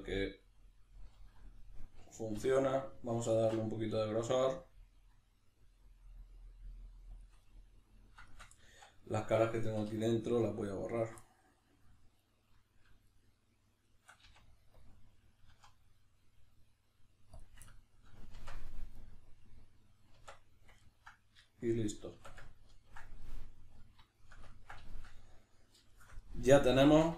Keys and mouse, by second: 2.3 l, 7.2 shift+click, 8.7 z, 9.8 3, 10.8 alt+right click, 11.2-12.2 middle drag, 12.2 right click, 13.1 shift+right click, 13.8 shift+right click, 14.3 x, 17.7-27.1 ctrl+middle drag, 18.4 Tab, 20.2 Tab, 22.2 Tab.